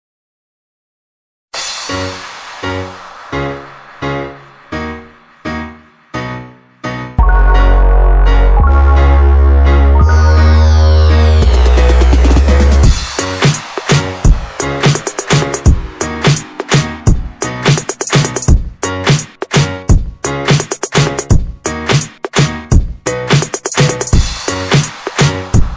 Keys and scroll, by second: 1.9 m, 1.9 space, 4.4 Escape, 5.2 m, 5.3 space, 7.4 Escape, 8.4 e, 8.5 space, 9.1 space, 12.7 m, 12.8 space, 15.4 m, 15.5 space, 16.4 Escape, 16.5 Escape, 19.8 m, 19.9 space, 20.7 Escape, 20.8 Escape, 22.0-22.9 typing, 24.8 Escape.